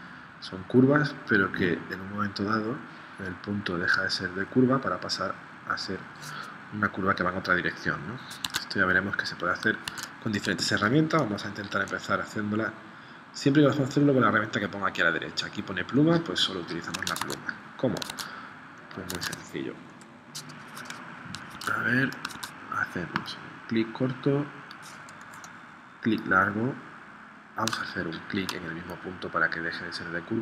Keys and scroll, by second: 8.5 super+Tab, 9.8 super+Tab, 17.3 super+Tab, 18.1 super+Tab, 19.1 super+Tab, 19.9 p, 21.5 super+Tab, 22.3 super+Tab.